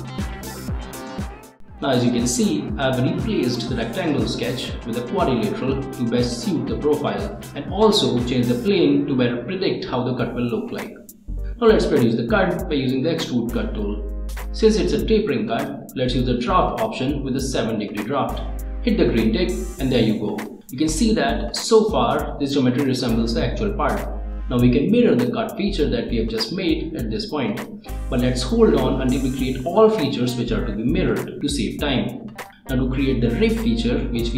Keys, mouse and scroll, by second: 0.0 click, 0.1 scroll down 1, 0.3 click, 1.8 click, 2.4 right click, 2.9 scroll down 2, 3.4 click, 3.6 right click, 4.4 right click, 5.9 click, 6.3 click, 7.7 click, 10.9 click, 13.4 click, 14.1 middle click, 14.6 scroll down 1, 15.8 click, 17.0 middle click, 17.3 click, 17.4 middle click, 18.5 click, 18.9 middle click, 20.1 click, 20.3-21.3 middle drag, 22.3 click, 22.6 click, 22.6 scroll up 1, 22.9 middle click, 23.2 ctrl+s, 24.0 click, 29.4-32.8 middle drag, 32.9 click, 33.6 click, 33.8 right click.